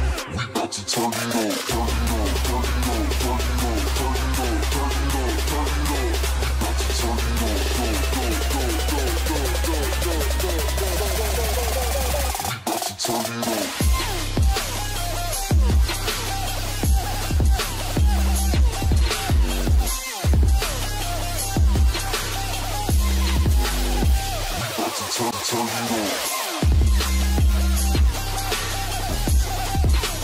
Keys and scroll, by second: 6.4 ctrl+alt+shift+g, 14.5 ctrl+space, 16.2 ctrl+shift+2, 16.7 ctrl+shift+space, 17.6 ctrl+shift+space, 26.5 Up, 26.6 Up, 26.7 Up, 26.9 Up, 27.3 Down, 27.7 Down.